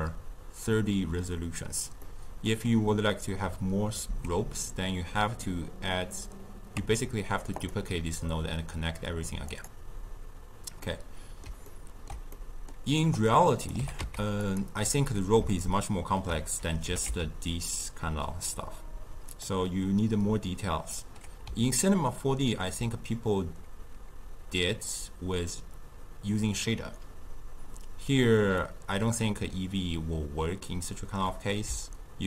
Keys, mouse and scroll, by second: 6.8 Tab, 7.6 click, 9.5-10.9 drag, 10.9-13.2 middle drag, 13.2 click, 13.8 g, 15.6-16.9 ctrl+middle drag, 16.9 g, 21.8-24.8 ctrl+middle drag, 28.6-31.7 middle drag.